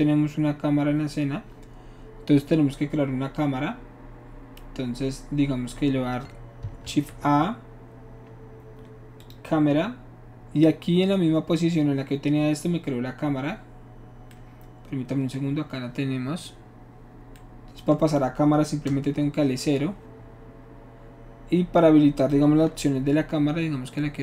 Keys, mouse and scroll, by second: 6.8 shift+a, 9.2 click, 18.9 KP_0.